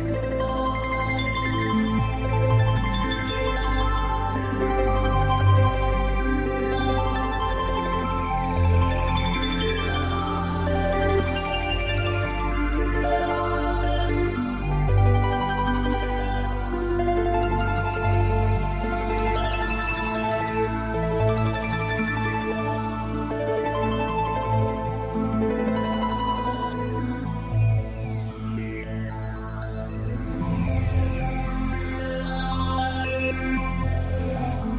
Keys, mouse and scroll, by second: 1.3 click, 4.4 click, 7.7 click, 8.9 click, 10.8-11.3 scroll down 2, 12.2 middle click, 19.3 s, 23.3 click, 24.9 click, 26.9 s, 31.7 click, 32.5 middle click.